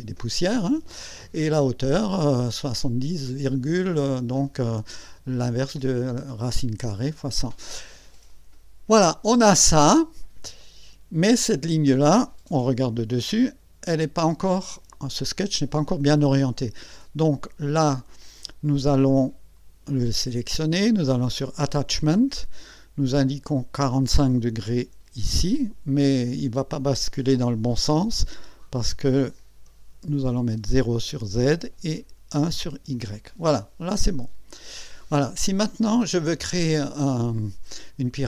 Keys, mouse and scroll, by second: 10.6 click, 11.5-11.9 scroll down 1, 12.6 KP_2, 23.6 click, 24.7 KP_4, 25.2 KP_5, 29.0 click, 31.0 KP_0, 31.9 click, 32.7 KP_1, 33.9 click, 35.0-36.6 drag.